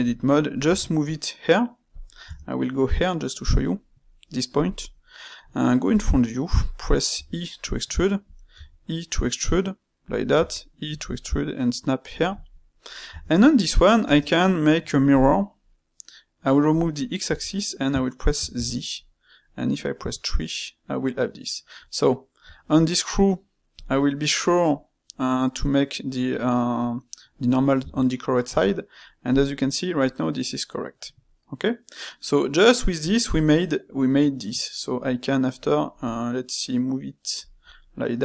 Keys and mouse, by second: 0.6 g, 2.2 Tab, 3.4 g, 4.8-5.8 middle drag, 5.8 KP_1, 7.1 e, 8.5 e, 12.4 middle click, 13.0 Tab, 13.4 middle click, 14.0 space, 21.0-24.1 middle drag, 24.7-27.8 middle drag, 30.0-33.0 middle drag, 33.2-35.9 middle drag, 35.9 g, 37.6-38.2 middle drag.